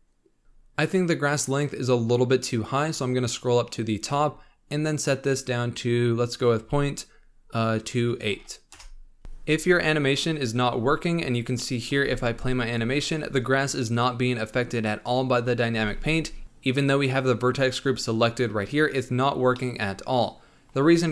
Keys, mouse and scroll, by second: 0.4-2.2 scroll up 1, 2.2-4.9 scroll up 29, 4.9-8.1 drag, 8.7 click, 9.3 click, 11.6-12.0 middle drag, 12.0 space, 16.0 space, 19.6-21.1 middle drag.